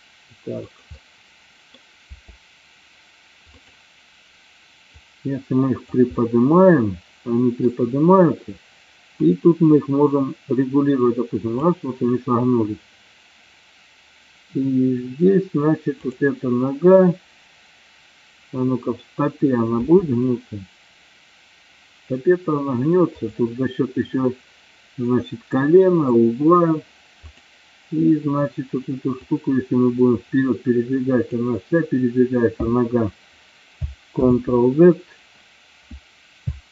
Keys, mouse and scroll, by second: 0.7 click, 1.1-1.9 middle drag, 2.2 r, 3.7 click, 5.1 click, 6.3-7.7 middle drag, 9.3-11.8 drag, 16.0-16.6 drag, 19.8 r, 23.3 click, 27.3-28.4 drag, 29.4-31.6 drag, 34.2 ctrl+a.